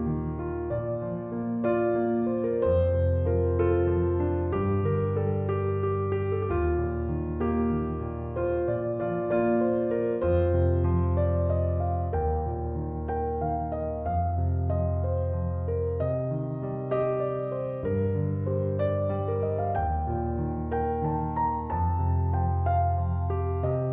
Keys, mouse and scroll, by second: 7.9 f, 22.0 f.